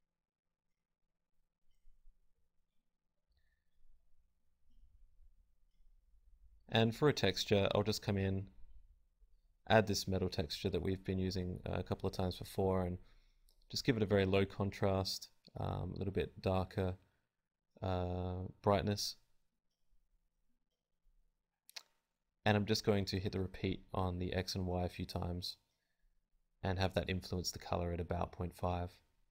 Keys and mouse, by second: 4.8-8.6 drag, 10.2-13.0 drag, 13.5 click, 16.5 click, 17.7-18.7 drag, 19.5-28.2 drag, 24.2-27.5 right drag, 29.0-29.3 right drag.